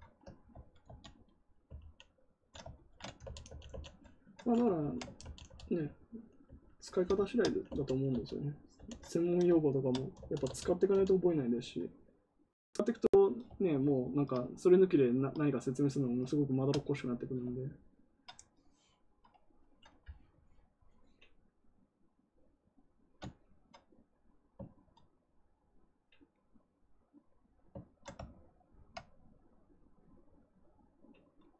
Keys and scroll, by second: 0.4 ctrl+z, 0.8 ctrl+z, 1.6 ctrl+d, 3.1 ctrl+d, 3.4 ctrl+d, 3.6 ctrl+d, 5.1 ctrl+d, 6.4 ctrl+d, 7.6 ctrl+d, 8.0 ctrl+d, 10.1 ctrl+d, 10.4 ctrl+d.